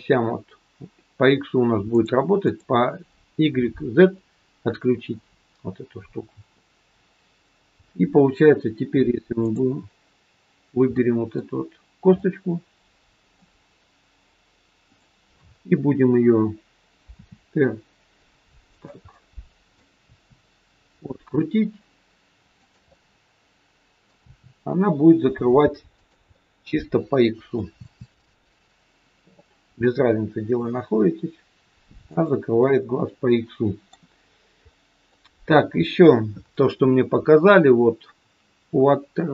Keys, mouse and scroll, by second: 1.8 click, 2.3 click, 9.3 click, 10.9 middle click, 12.2 middle click, 14.8 click, 17.2 r, 19.2 middle click, 19.9 r, 22.8 middle click, 24.2 r, 26.2 scroll up 1, 26.3 middle click, 27.7 r, 32.6 middle click, 34.2-34.7 scroll down 4, 34.7 middle click, 34.7-35.4 scroll up 1, 35.6-35.9 scroll up 2, 37.7-38.6 scroll up 1.